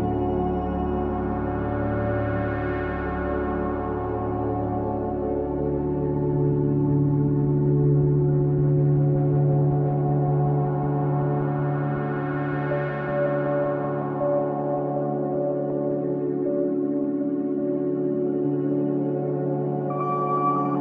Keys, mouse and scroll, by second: 1.0 click, 4.5 click, 6.1 click, 7.6-11.2 middle drag, 11.2-11.6 scroll up 1, 11.6-12.9 shift+middle drag, 12.9 click, 14.9 drag, 15.2-18.6 middle drag, 18.6-19.1 scroll up 1, 19.1 scroll down 1, 19.4-20.8 middle drag.